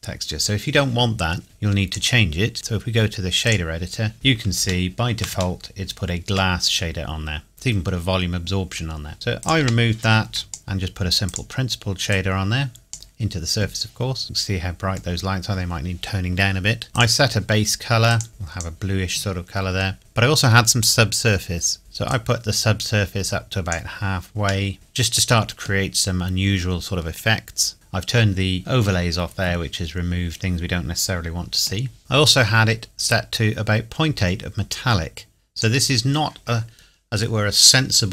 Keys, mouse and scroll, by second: 1.4 click, 4.1-4.6 scroll up 1, 4.6 shift+scroll down 1, 4.7-5.1 shift+scroll up 1, 5.6 shift+middle click, 7.5 scroll down 1, 9.1 Delete, 9.4 click, 9.6 Delete, 10.5 click, 14.1 scroll down 1, 14.2 middle click, 16.9-17.8 scroll up 1, 17.8 click, 22.1 click, 24.6 middle click, 24.7 middle click, 24.7 scroll up 1, 27.7 click, 29.7-30.4 scroll down 1, 30.4 middle click, 33.0 click.